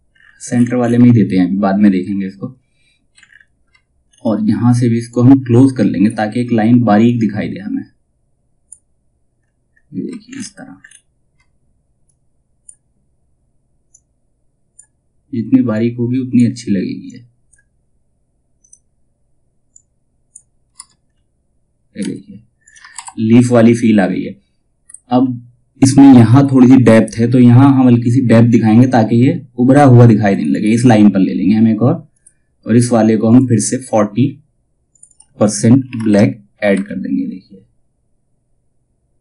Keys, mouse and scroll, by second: 1.7-2.2 alt+scroll down 1, 4.6-8.9 drag, 8.9-9.6 scroll down 1, 11.6-20.2 drag, 20.2 space, 22.1 click, 22.5 shift+F2, 23.5 space, 26.5 scroll down 1, 27.5-29.3 scroll up 1, 29.8 click, 36.4 shift+Tab, 38.7-39.2 drag.